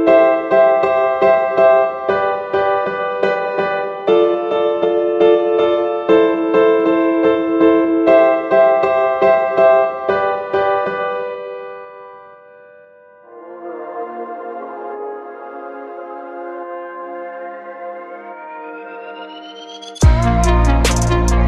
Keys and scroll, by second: 1.6 ctrl+c, 3.1 ctrl+v.